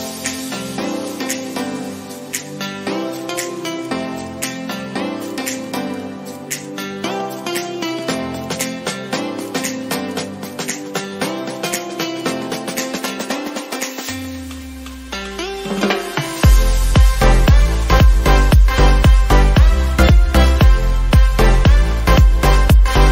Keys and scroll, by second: 16.8 ctrl+z, 17.1 ctrl+j.